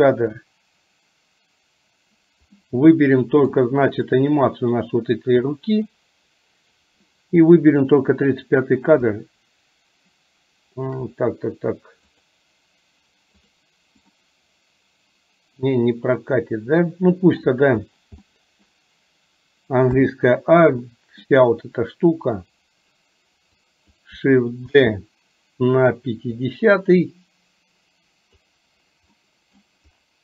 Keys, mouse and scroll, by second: 2.5-3.5 middle drag, 4.4 click, 7.5-7.9 drag, 12.3 click, 13.5 drag, 14.2-17.4 middle drag, 18.3-18.7 middle drag, 20.0 a, 20.9 middle click, 23.7-24.0 drag, 24.8 shift+d, 27.2-28.5 drag, 29.3 middle click.